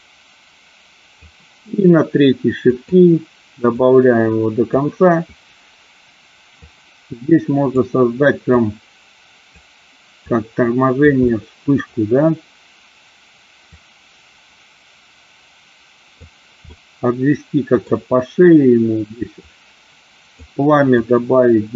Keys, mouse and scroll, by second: 2.8 click, 3.8-4.9 drag, 6.7-8.0 drag, 8.7 click, 10.4 click, 11.4 middle click, 13.9-16.4 drag, 16.9 middle click, 19.6 click, 21.1-21.7 drag.